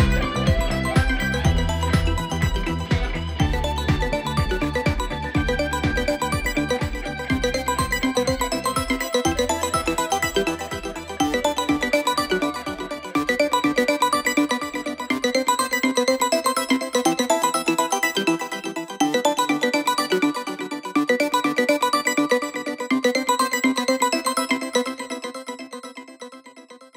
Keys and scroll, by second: 2.4 7, 11.4 4.